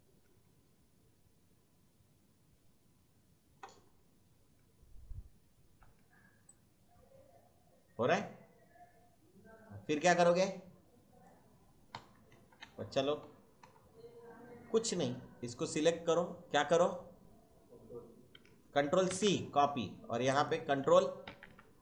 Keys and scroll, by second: 0.0 space, 5.6 space, 11.9 Left, 13.2 Right, 13.6 Left, 19.0 ctrl+c, 21.2 ctrl+v.